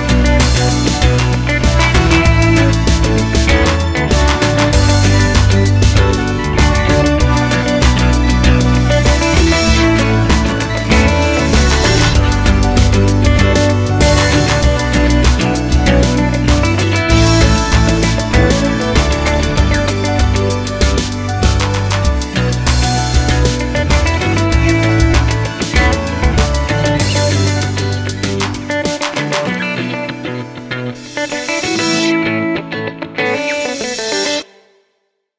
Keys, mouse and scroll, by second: 0.2 a, 0.5-1.4 scroll up 1, 1.4 i, 3.6 ctrl+i, 4.8 x, 7.7-10.1 drag, 10.8-13.4 middle drag, 11.8 alt+e, 13.4 KP_7, 14.0 s, 14.8 KP_1, 15.1 g, 16.3-17.9 middle drag, 17.0 alt+e, 17.9 KP_1, 18.2 g, 18.5 click, 18.6 middle click, 19.4 Tab, 19.4-24.9 middle drag, 19.6 scroll down 2, 19.7 click, 20.6-21.1 scroll down 2, 21.1-21.5 scroll up 2, 21.5 click, 24.9 click, 25.1 x, 30.7-32.3 drag, 31.2 Tab, 31.7 s, 33.3 ctrl+z, 33.8 Tab, 34.1 2, 34.3 1, 34.8 s.